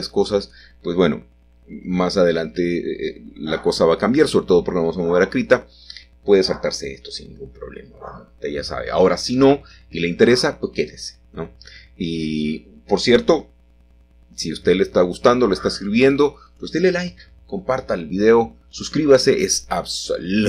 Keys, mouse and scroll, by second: 1.0 click, 2.9-3.3 typing, 7.1 middle click, 7.4-8.3 scroll up 1, 11.7-12.7 shift+middle drag, 12.8 s, 12.9 z, 14.3 click, 15.9 ctrl+r, 16.5-17.1 scroll up 1, 17.1 scroll up 1, 17.1 click, 17.4 click.